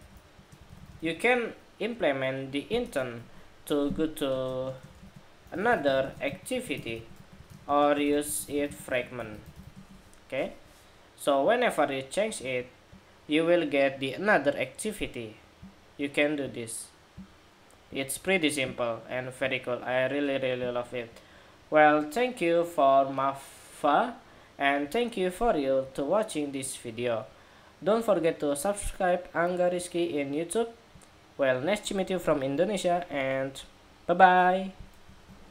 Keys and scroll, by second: 35.3 shift+super+2.